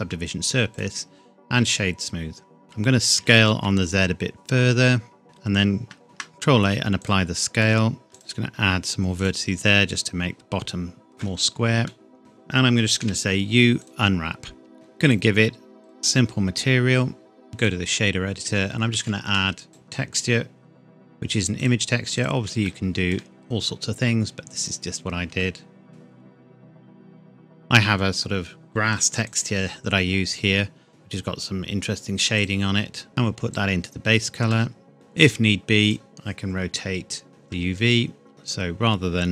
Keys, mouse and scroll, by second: 0.7 right click, 1.7 click, 3.1 s, 3.5 z, 5.2-5.6 scroll down 1, 6.0 ctrl+a, 7.0 click, 7.6 shift+middle click, 8.1 ctrl+r, 8.1 click, 9.5 Tab, 9.9-10.9 scroll down 1, 11.9 middle click, 12.2 a, 13.0 u, 13.8 click, 14.7 Tab, 15.0 click, 17.5 click, 18.4-18.9 scroll up 1, 19.3 shift+a, 19.7 click, 22.6 shift+middle click, 22.9 shift+middle click, 23.1-24.6 shift+scroll up 2, 24.6 click, 25.9-26.3 scroll down 1, 29.2 click, 32.4 click, 34.5 shift+middle click, 35.1 click, 37.3 scroll down 1, 37.5 Tab.